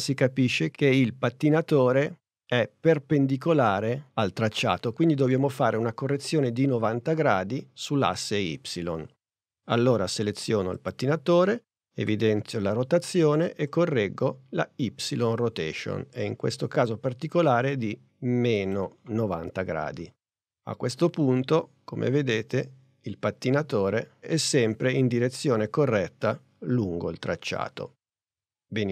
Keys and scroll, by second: 12.1 r.